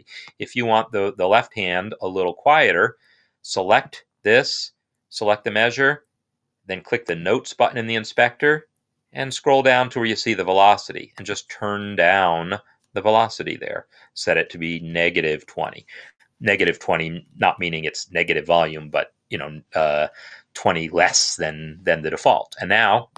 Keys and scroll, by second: 12.9 Down, 13.3 Down, 13.4-14.2 Down, 16.0 Down, 19.4 Down, 20.8 Down.